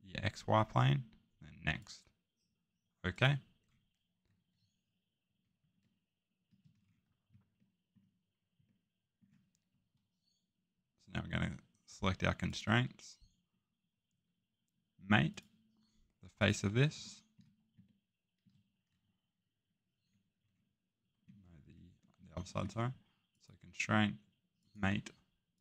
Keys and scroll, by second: 16.9 a, 21.4 Escape.